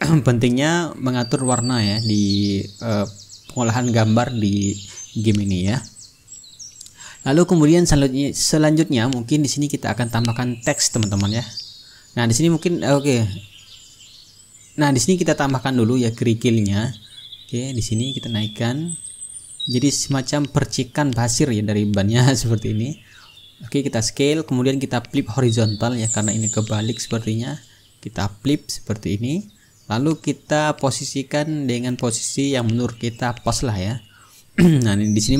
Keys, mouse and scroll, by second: 1.3-4.5 drag, 8.6-9.8 ctrl+middle drag, 9.8-11.1 drag, 12.5 click, 13.4 click, 14.3 click, 17.9 click, 20.6 click, 21.7-24.9 drag, 25.0-27.0 drag, 25.6-26.2 ctrl+scroll up 1, 28.9 click, 30.9 click, 32.0 ctrl+middle click, 32.6-35.3 drag.